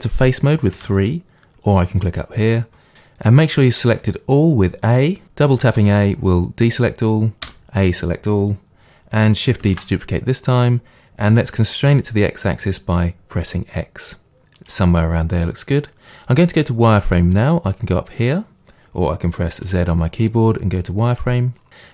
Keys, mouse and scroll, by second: 0.8 3, 4.0 a, 9.7 shift+d, 14.7 click, 18.2 click, 19.6 z.